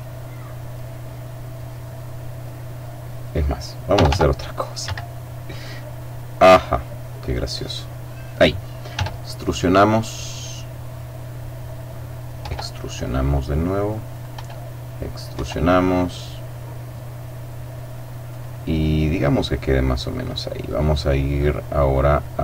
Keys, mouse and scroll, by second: 0.0 click, 0.9 click, 1.8 click, 2.6 click, 3.7 r, 4.7 Escape, 6.4-8.5 middle drag, 8.7 e, 11.4 click, 12.2 e, 14.0 click, 14.2 e, 14.9 click, 15.2 e, 18.1 click, 18.6 right click, 20.7 click, 21.9-22.4 scroll up 2.